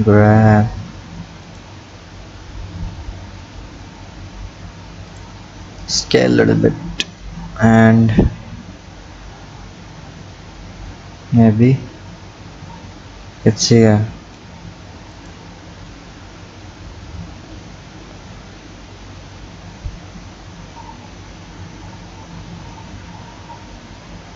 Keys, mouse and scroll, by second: 1.9 scroll up 1, 15.2 click.